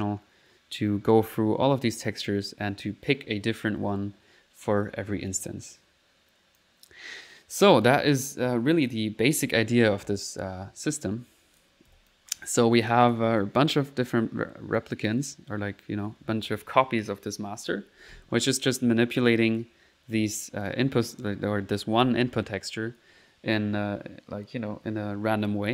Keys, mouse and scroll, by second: 1.6 middle click, 2.1 click, 5.1 middle click, 6.0 middle click, 6.6 click, 7.9 click, 11.6 click, 11.9 p, 12.1 click, 12.9 click, 13.5 middle click, 14.8 click, 15.6 click, 19.3-20.7 right drag, 20.7 click.